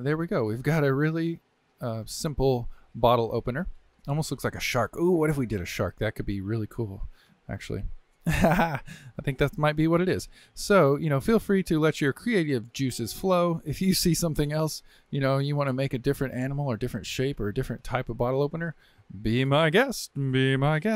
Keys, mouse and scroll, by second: 3.2-8.3 shift+middle drag, 8.3 scroll down 1, 8.6-12.3 shift+middle drag, 13.2-16.2 middle drag, 16.3-20.9 shift+middle drag.